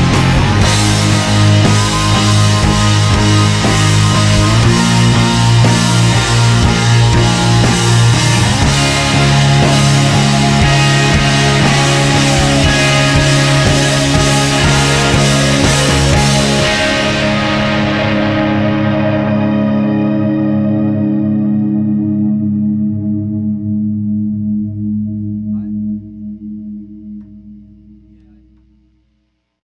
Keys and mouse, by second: 3.8 click, 4.7-11.5 middle drag, 12.0-13.9 middle drag, 14.1-21.8 middle drag, 22.0 click, 22.8 middle click, 23.0-24.3 drag, 24.3 middle click, 26.7-28.3 drag, 28.3 middle click.